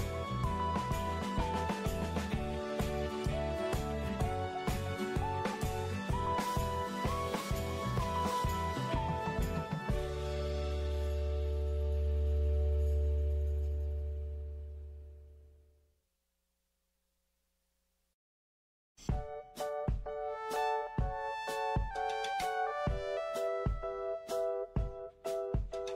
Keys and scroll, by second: 12.3 ctrl+shift+x, 13.4 ctrl+a, 13.9 Delete, 15.4 ctrl+shift+v.